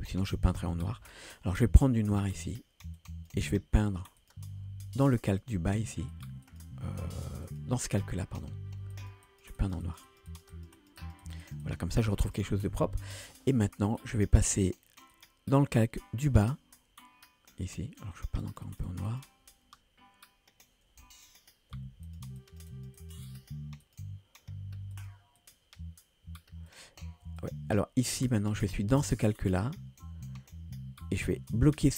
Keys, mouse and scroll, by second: 0.0 ctrl+z, 0.2 ctrl+z, 0.5 ctrl+z, 0.7-3.4 ctrl+z, 2.0 click, 4.2-8.5 drag, 9.0 click, 9.3 click, 9.6 click, 9.9 click, 10.1 click, 10.3 click, 10.6 click, 10.8 click, 11.0 click, 11.3 click, 12.3 click, 14.0-18.0 drag, 18.5 click, 21.7 f, 22.4 click, 23.0 click, 23.8-31.9 drag.